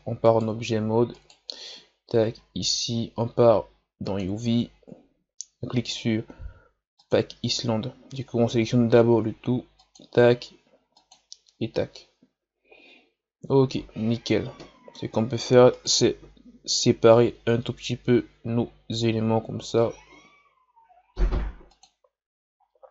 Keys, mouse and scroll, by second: 0.3 right click, 1.1 right click, 1.6 Tab, 2.1 a, 2.3 a, 4.0-7.1 drag, 8.6 a, 9.8-12.8 drag, 13.0 scroll down 1, 13.7 scroll up 2, 14.6-15.7 middle drag, 15.7 right click, 17.2 l, 19.8 g, 22.6 scroll down 3.